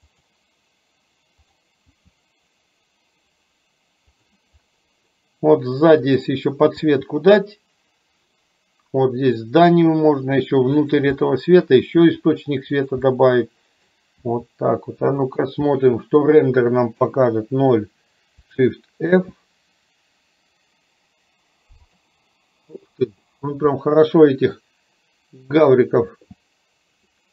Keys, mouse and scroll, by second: 1.5 click, 2.1 g, 5.2-6.2 middle drag, 7.0 g, 11.5 middle click, 12.1 g, 13.2 middle click, 14.4 g, 16.0 middle click, 17.2 KP_0, 19.2 shift+f, 26.1 shift+g.